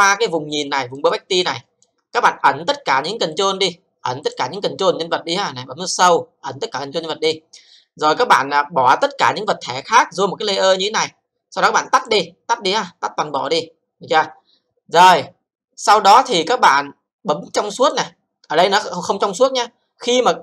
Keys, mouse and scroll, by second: 0.7 alt+middle click, 1.1 alt+click, 1.7 alt+middle click, 2.1 alt+c, 3.4 click, 4.3 click, 6.0 click, 7.2 click, 12.0 click, 17.8 click, 19.3-20.4 scroll up 2.